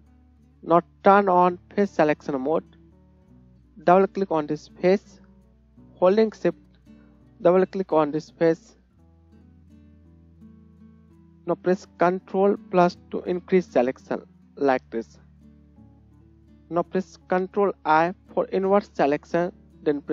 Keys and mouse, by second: 0.1-7.9 right drag, 2.2-4.3 drag, 2.2-4.3 middle drag, 4.4 click, 4.4 middle click, 7.2 shift+click, 7.2 shift+middle click, 7.4 shift+click, 7.4 shift+middle click, 7.9-15.3 shift+drag, 10.2 shift+middle click, 10.2 shift+right click, 10.4 shift+middle click, 10.4 shift+right click, 13.4 ctrl+KP_Add, 13.7 ctrl+KP_Add, 14.2 ctrl+KP_Add, 14.9 ctrl+KP_Add, 15.9 ctrl+KP_Subtract, 18.6 ctrl+i.